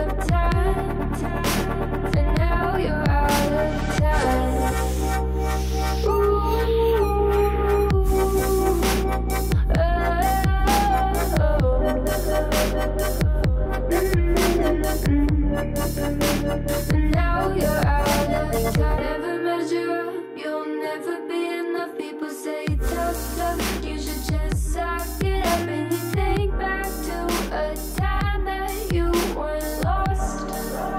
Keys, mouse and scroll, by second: 0.4 alt+z, 0.5 middle click, 1.2 scroll down 4, 1.4 middle click, 2.3 click, 2.4 scroll down 2, 2.5 middle click, 2.8-5.0 typing, 3.3-3.9 scroll up 9, 4.1 click, 4.3-5.0 shift+scroll down 2, 4.5 shift+middle click, 7.2 middle click, 7.8 scroll down 4, 8.0 middle click, 8.9 scroll up 2, 9.2 KP_1, 9.3 alt+z, 10.0 3, 10.2 click, 10.6 click, 11.2 alt+z, 11.3 alt+z, 11.6 3, 12.1 1, 12.2 click, 12.7 click, 13.1 g, 14.3 alt+z, 14.6 click, 14.8 scroll down 3, 15.0-16.5 middle drag, 17.3 scroll down 2, 17.5 Tab, 17.6 click, 17.7-19.1 middle drag, 19.1 KP_3, 19.6 shift+middle click, 19.9-21.8 scroll up 4, 22.0 click, 22.3 click, 22.5 click, 23.3 click, 23.8 click, 24.0 alt+z, 24.3 click, 24.7 shift+middle click, 25.0-26.6 scroll up 2, 26.6 scroll down 2, 26.8-27.9 shift+middle drag, 27.9 click, 28.4 KP_1, 29.3 Tab, 29.7 shift+middle click, 29.9-30.3 scroll up 2, 30.3-30.9 shift+middle drag.